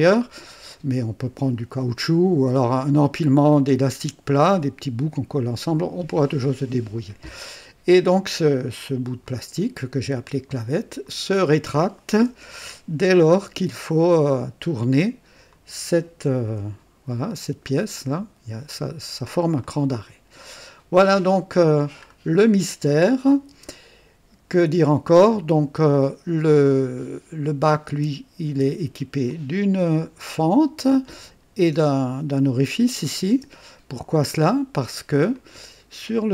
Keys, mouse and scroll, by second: 6.9 click, 9.2-10.4 drag, 11.0-11.9 drag, 12.3 KP_3, 15.5 click, 16.5 &, 19.6-20.8 drag, 21.0 click, 22.0-22.3 scroll down 1, 23.3 click, 23.5 space, 24.5 click, 25.2-27.2 drag, 26.2 typing, 27.6 click, 27.9-28.5 typing, 29.3-31.3 drag, 32.1-33.2 typing, 34.3 click, 35.3-36.3 drag.